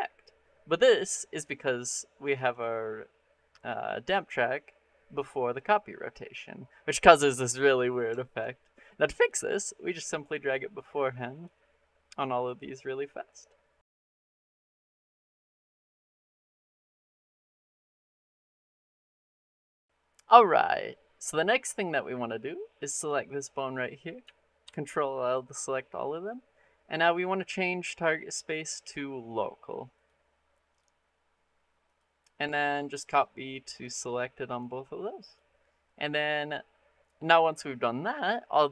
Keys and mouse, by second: 1.3 click, 1.8 middle click, 2.3 click, 7.7 middle click, 8.1 shift+middle click, 9.8-11.3 drag, 12.4 click, 13.8 click, 14.9-15.2 drag, 15.9 drag, 16.9 click, 17.3 click, 17.7 click, 18.6 click, 19.6 click, 22.7-24.1 drag, 24.5 ctrl+l, 28.3-29.9 drag, 30.7-31.9 drag, 32.9-33.7 drag, 34.3 click.